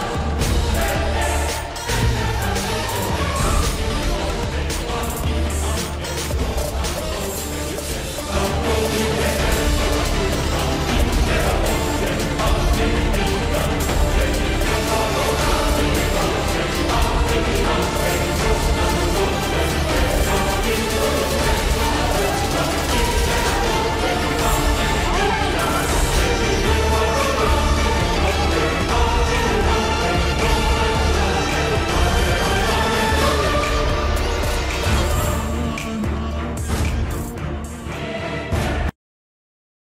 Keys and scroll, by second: 15.2 ctrl+t, 26.5 ctrl+-.